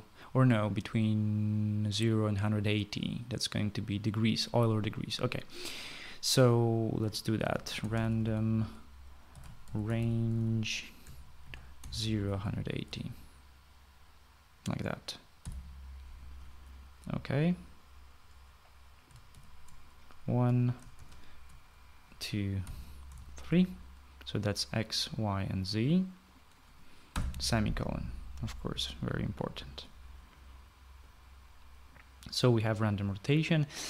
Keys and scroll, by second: 8.2-9.0 typing, 10.1-13.9 typing, 16.0-16.7 typing, 20.1 ctrl+c, 21.8 ctrl+v, 23.4 ,, 24.0 ctrl+v, 27.9 ;.